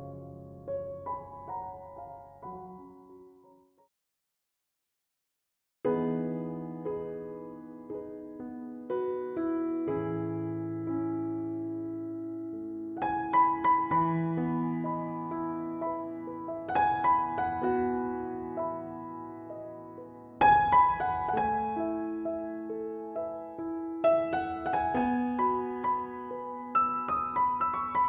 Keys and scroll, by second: 1.1 ctrl+z.